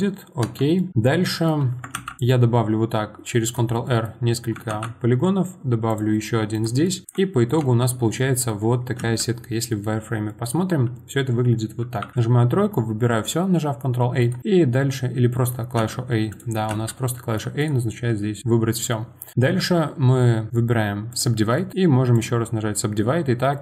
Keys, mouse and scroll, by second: 0.4 Tab, 0.8-1.9 middle drag, 1.9 ctrl+r, 3.8 middle click, 4.7 ctrl+r, 6.8 middle click, 7.0 Tab, 7.1 middle click, 7.6 Tab, 9.0 z, 9.6-11.8 middle drag, 11.8 3, 12.1 a, 14.2-15.3 right drag, 15.3 middle click, 15.8 a, 16.3 click, 16.7 a, 17.2 middle click, 17.6-21.5 right drag, 21.5 middle click, 21.7-23.6 right drag.